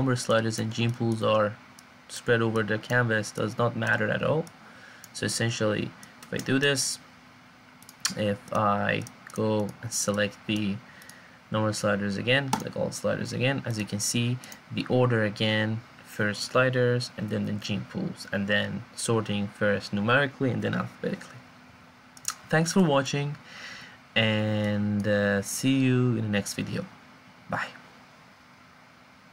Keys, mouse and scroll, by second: 5.4 click, 6.0 click.